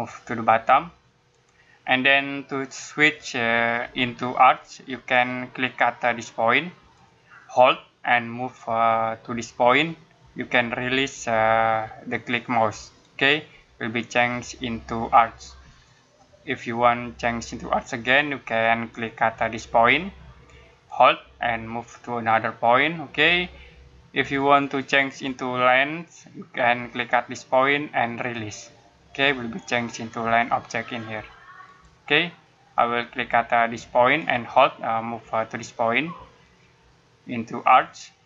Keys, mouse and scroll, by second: 6.8 click, 20.7 click, 32.0 click.